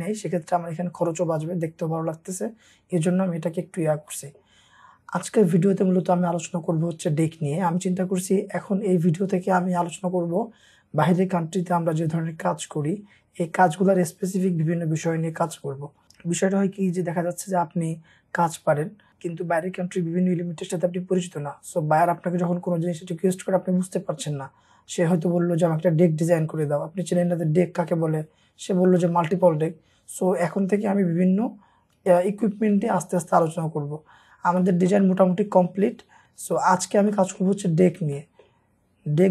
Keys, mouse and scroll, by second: 0.3-1.5 scroll down 1, 2.6-3.1 scroll up 1, 3.6-4.1 scroll down 1, 4.1 middle click, 34.3-34.6 scroll down 1, 34.6 middle click, 35.2-35.8 scroll down 1, 37.1 middle click, 37.7 scroll up 1, 38.2 middle click, 38.6 scroll down 1, 39.1 scroll up 1.